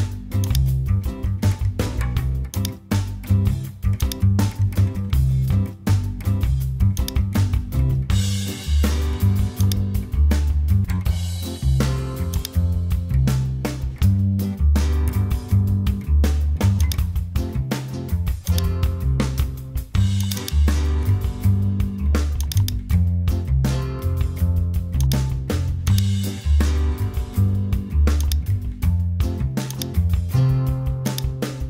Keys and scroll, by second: 4.6 super+a, 4.7-6.6 typing, 8.6 super+t, 11.6 Return.